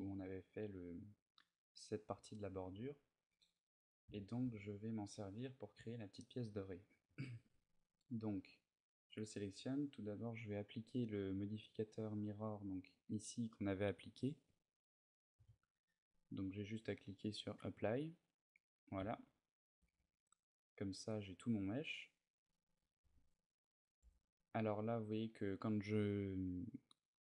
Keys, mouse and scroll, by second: 3.0-3.6 shift+middle click, 3.6 middle click, 4.6 ctrl+shift+middle click, 6.0 middle click, 8.3 right click, 12.2 click, 17.3 click, 18.5 middle click, 19.0 shift+middle click, 19.7 Tab, 20.1 middle click, 24.3 middle click, 26.8 middle click.